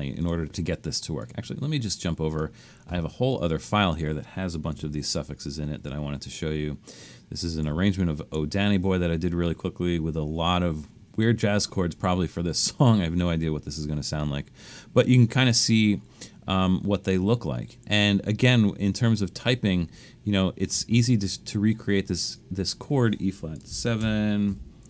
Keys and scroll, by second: 5.2 super+=, 5.8 super+=, 7.7 super+=, 23.7-24.8 typing.